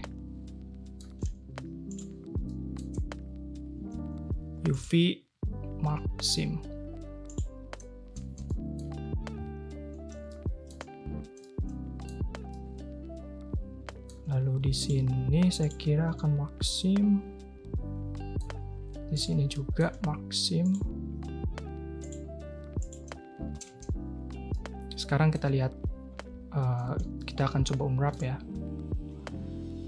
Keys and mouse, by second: 4.7-7.4 drag, 8.0 a, 8.2 a, 8.4 click, 9.3 2, 10.2-10.7 shift+drag, 11.4-12.0 drag, 12.5-13.7 drag, 13.7 middle click, 14.7 shift+click, 16.8-18.3 drag, 19.1 shift+click, 19.5 click, 20.6 shift+click, 22.0-22.9 drag, 23.5 a, 23.7 a, 24.5-25.3 drag, 27.1-28.1 shift+middle drag.